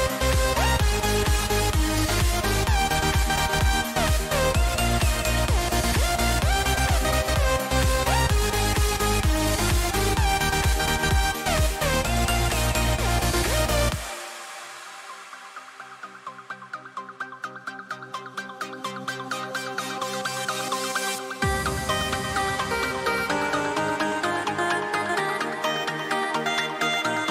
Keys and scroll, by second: 7.9 ctrl+-, 8.4 ctrl+-, 21.3 ctrl+=.